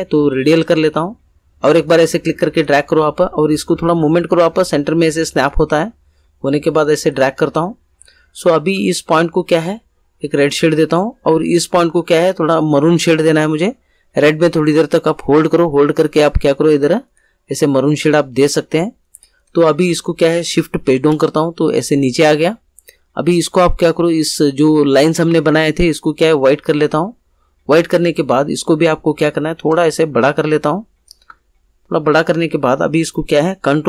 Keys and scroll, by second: 20.8 shift+Page_Down.